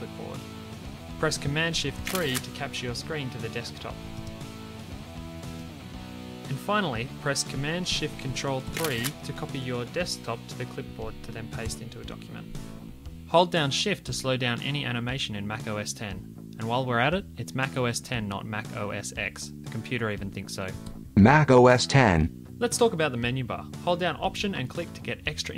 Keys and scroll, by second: 1.9 super+BackSpace, 2.1 shift+super+3, 8.7 ctrl+shift+super+3, 11.6 super+v.